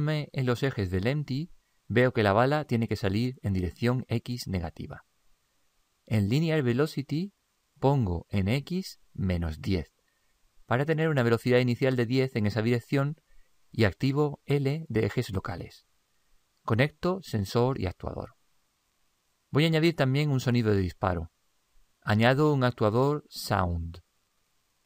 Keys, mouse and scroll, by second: 7.0 click, 8.9 click, 15.6-20.4 drag, 21.8 click.